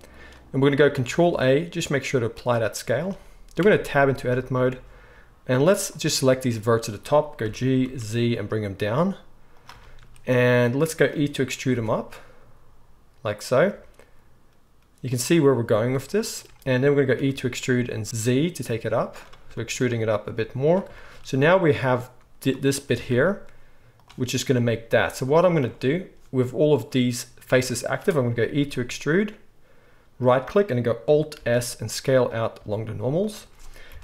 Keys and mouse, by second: 0.8 ctrl+a, 3.6 Tab, 5.9 click, 7.4 g, 9.7-21.8 shift+middle drag, 11.7 e, 13.7 z, 17.2 e, 20.3 z, 21.8-24.0 drag, 22.9 s, 24.0-34.0 middle drag, 25.0 z, 28.6 e, 31.3 alt+s, 33.9 KP_1.